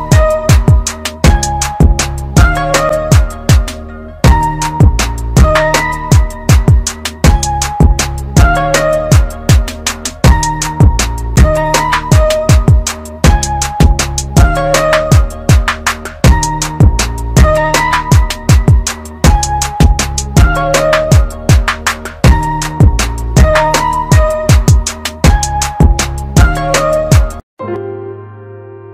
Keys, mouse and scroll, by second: 1.1 shift+click, 9.0 click, 12.0 click, 17.0 click, 23.7 space, 24.1 click, 28.5 click.